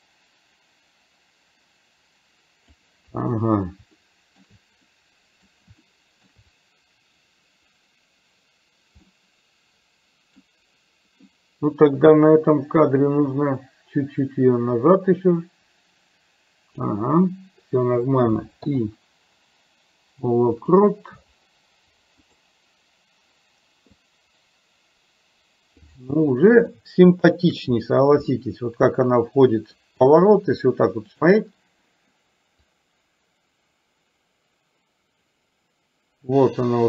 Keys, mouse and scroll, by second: 4.0 shift+middle click, 5.0 middle click, 5.9 shift+middle click, 9.2-10.4 middle drag, 12.9-17.0 drag, 18.7 i, 22.4 click, 24.0-26.0 drag, 26.7-27.5 shift+middle drag, 28.4-29.8 middle drag, 31.2 click, 32.8-36.8 drag.